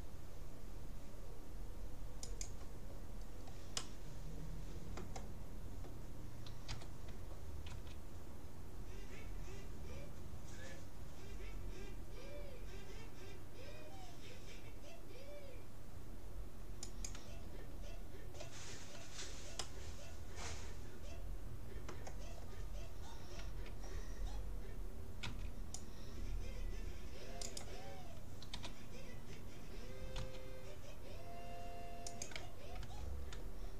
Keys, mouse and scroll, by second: 3.2-5.6 middle drag, 6.7 g, 18.8-21.2 middle drag, 23.4 a, 25.2 c, 27.6-29.2 drag, 28.6 g, 32.8 a.